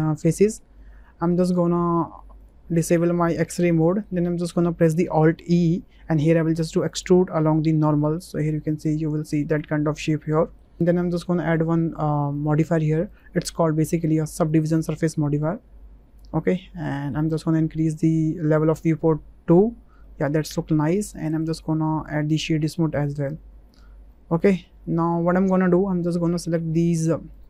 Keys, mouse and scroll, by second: 1.0 middle click, 3.0 shift+middle click, 3.9 shift+middle click, 4.2 click, 5.4 alt+e, 9.5 click, 10.2 middle click, 10.7 Tab, 12.3 click, 13.1-14.6 drag, 15.1-16.5 middle drag, 16.9 shift+middle click, 20.0 shift+middle click, 21.3-22.6 drag, 22.9 click, 23.2-23.8 drag, 24.1-24.6 middle drag, 24.9 shift+click, 25.3 Tab, 26.0 shift+click, 26.7 2.